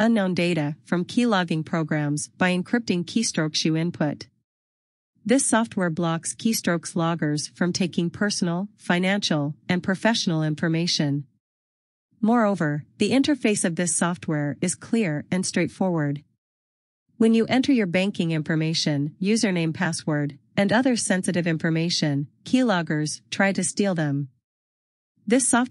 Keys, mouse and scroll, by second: 4.5 scroll down 1, 11.3-11.6 scroll down 1, 11.7 scroll up 1, 14.0 click.